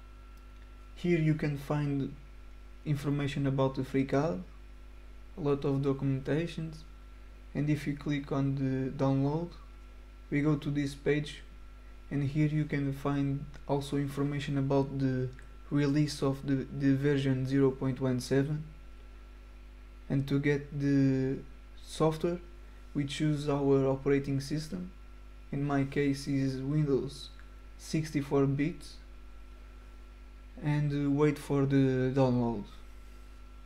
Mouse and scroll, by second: 6.7 click, 23.6 click, 28.3 click.